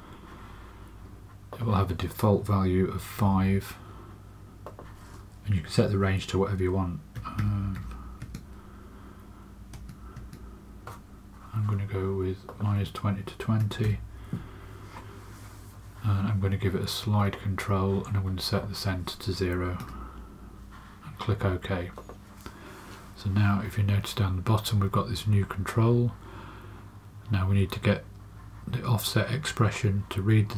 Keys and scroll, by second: 3.1 5, 6.9-8.2 typing, 9.7 Tab, 10.1 Tab, 13.3-14.3 typing, 19.8 0.